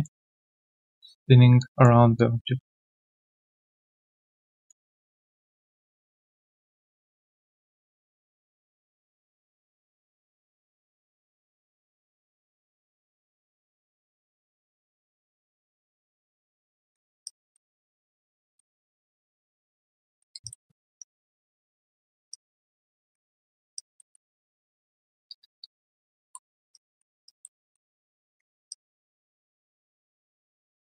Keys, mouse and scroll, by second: 1.6 alt+click, 4.3 alt+right click, 4.5 alt+click, 4.8 alt+right click, 5.0 alt+click, 5.2 alt+middle click, 5.4 alt+click, 5.7 alt+right click, 5.9 alt+click, 6.3 alt+middle click, 6.6 alt+right click, 7.1 1, 7.4 alt+click, 7.7 alt+middle click, 8.0 alt+click, 8.5 alt+middle click, 8.7 alt+click, 9.9 3, 9.9 alt+right click, 10.1 alt+click, 11.7 alt+scroll down 1, 11.9 alt+click, 12.2 alt+middle click, 12.4 alt+click, 12.8 1, 13.3 alt+click, 13.7 alt+right click, 13.9 alt+middle click, 14.2 alt+right click, 14.5 alt+click, 17.2 alt+click, 17.6 alt+middle click, 17.9 alt+click, 18.7 alt+middle click, 19.0 alt+click, 19.3 alt+right click, 19.6 right click, 20.4 shift+click, 21.0 shift+right click, 22.3 alt+click, 23.7 alt+click, 24.1 alt+middle click, 25.1 shift+click, 25.8 alt+click, 26.2 alt+middle click, 26.4 3, 26.7 alt+click, 27.0 alt+middle click, 27.2 alt+click, 27.6 alt+middle click, 28.0 alt+click, 28.4 1, 28.7 alt+click, 29.3 alt+click, 29.5 right click, 30.1 right click.